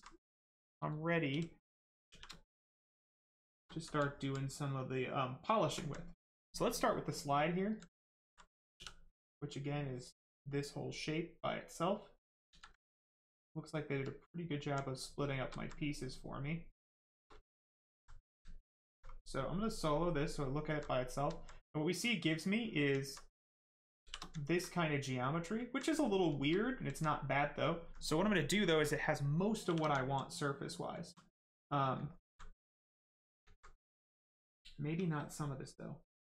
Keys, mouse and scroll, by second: 0.3 right click, 0.4 right click, 1.3 shift+f, 2.0 shift+f, 2.3 right click, 2.3 right click, 3.3 shift+right click, 3.7 alt+right click, 3.9 alt+right click, 4.4 right click, 4.5 right click, 5.5 shift+right click, 5.7 alt+right click, 6.5 right click, 8.0 alt+right click, 9.1 right click, 9.1 right click, 9.8 click, 10.7 right click, 12.5 ctrl+z, 12.7 right click, 14.9 right click, 15.2 shift+right click, 15.5 alt+right click, 15.8 right click, 16.9 shift+right click, 20.0 click, 20.5 alt+right click, 20.9 right click, 20.9 right click, 21.3 alt+right click, 21.7 right click, 22.9 alt+right click, 23.6 shift+right click, 24.0 shift+f, 24.3 alt+right click, 24.7 right click, 24.7 right click, 25.6 alt+right click, 25.9 right click, 26.0 right click, 26.2 shift+right click, 26.5 alt+right click, 27.3 right click, 27.3 right click, 27.7 alt+right click, 29.6 shift+f, 30.0 alt+right click, 30.3 right click, 30.4 right click, 30.9 alt+right click, 31.3 right click, 31.4 right click, 32.0 alt+right click, 33.9 shift+right click.